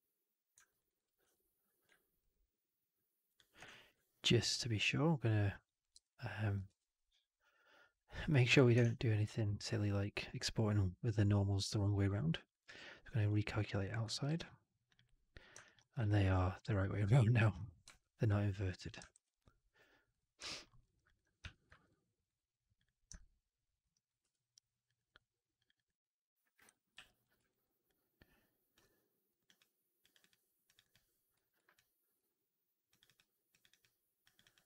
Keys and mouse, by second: 0.6 alt+right click, 0.7 alt+right click, 1.1 4, 2.1 shift+click, 3.2 shift+drag, 3.6 alt+middle drag, 5.9 3, 6.6 ctrl+a, 8.7 shift+Tab, 14.1 alt+v, 15.5 alt+click, 15.9 4, 16.2-17.4 alt+drag, 17.9 3, 19.0 alt+v, 20.3 typing, 20.6 middle click, 20.7 right click, 20.9 click, 21.4 4, 21.6 alt+middle drag, 21.7-22.1 alt+right drag, 22.0 alt+middle click, 22.7 click, 23.0-23.7 alt+drag, 23.8 right drag, 24.1 2, 24.8 click, 24.9 click, 25.5 click, 25.6 click, 26.9 ctrl+f, 27.4 alt+right click, 27.7 click, 29.2 click, 29.3 click, 29.9 click, 30.1 click, 30.6 click, 30.7 click, 31.2 f, 31.6 click, 32.9 click, 33.4 click, 33.6 click, 34.1 click, 34.3 click.